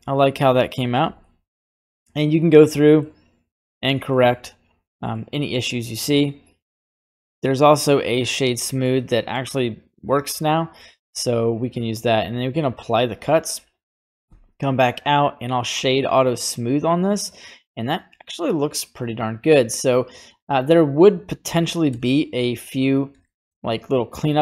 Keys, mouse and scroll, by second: 1.2-2.5 middle drag, 2.9 middle click, 4.0 middle click, 5.1 middle click, 6.1 scroll up 2, 6.6 middle click, 7.9 click, 8.8 middle click, 10.0 scroll down 1, 10.7 middle click, 10.7 scroll down 1, 12.2 click, 14.2 q, 15.7-20.6 middle drag, 21.8 Tab, 22.6-23.2 scroll up 5, 23.2 shift+middle click.